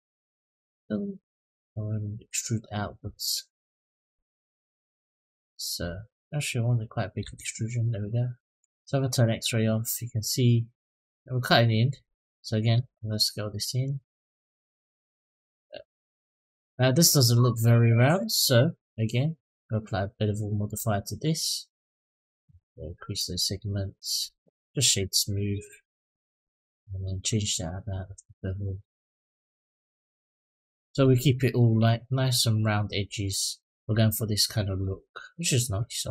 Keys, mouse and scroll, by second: 0.5-6.5 drag, 7.0 Tab, 8.7 click, 9.3-10.5 middle drag, 11.7 click, 12.5 s, 14.3-15.1 middle drag, 15.3 click, 15.7-16.1 scroll up 2, 16.3 shift+middle drag, 16.7-17.2 middle drag, 18.0 click, 19.1-20.5 drag, 22.9 click, 24.6 right click, 26.9-30.7 drag, 31.3 click, 33.1-33.4 middle drag, 33.8-34.2 scroll down 2, 34.6 click.